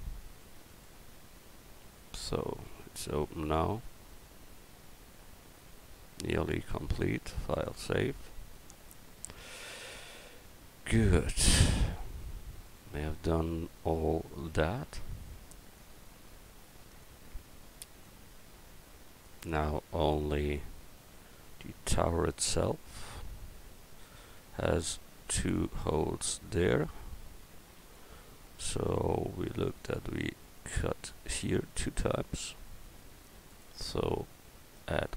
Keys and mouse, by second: 0.4 Tab, 3.3-4.4 middle drag, 8.5-22.7 middle drag, 32.1 middle click, 33.5-35.1 drag.